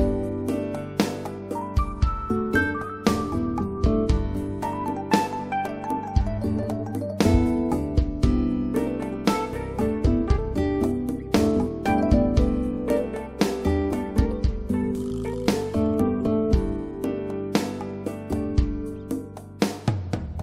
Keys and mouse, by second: 4.4 h, 7.0 alt+h, 9.2 h, 10.8-12.8 right drag, 14.8-16.5 drag, 18.8-19.2 drag.